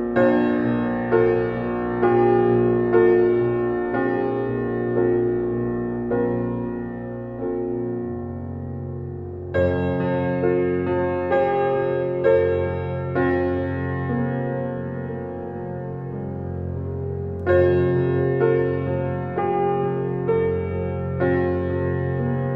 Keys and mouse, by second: 0.0-1.2 typing, 1.4 Return, 3.4-3.9 drag, 5.5 click, 6.2 click, 6.9 typing, 8.4 click, 9.6-11.4 typing, 12.5 click, 13.2 click, 13.7-15.0 typing, 16.6 click, 17.1-17.9 typing, 17.7 click, 18.5 click, 20.0 click, 20.4 click.